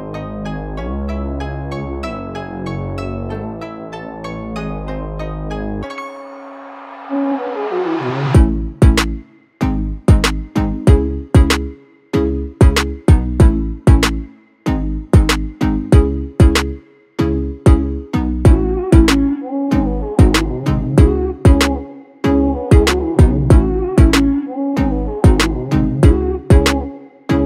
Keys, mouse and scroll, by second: 3.6-23.3 drag, 24.3 ctrl+t, 25.4-27.4 alt+drag.